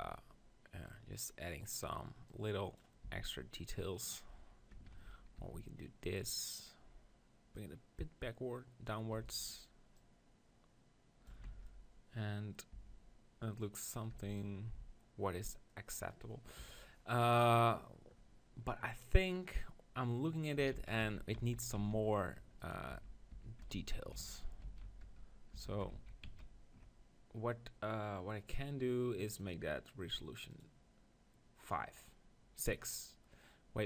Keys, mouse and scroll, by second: 1.6-3.6 right drag, 2.3-4.1 drag, 3.2 s, 4.9 ctrl+z, 5.4 s, 6.6-9.5 drag, 9.1 e, 9.3-11.7 right drag, 10.0-11.3 drag, 11.3 Tab, 11.5 z, 12.8 Tab, 14.1 Tab, 16.6 KP_1, 20.8 ctrl+z, 21.1 ctrl+z, 21.4 ctrl+z, 21.8 ctrl+z, 22.6 right click, 22.9 Tab, 23.3 Tab, 23.8 ctrl+z, 23.8 right click, 24.1 ctrl+z, 24.7 ctrl+z, 25.1 Tab, 25.5 Tab, 26.0 ctrl+z, 26.3 ctrl+z, 29.3-32.8 drag.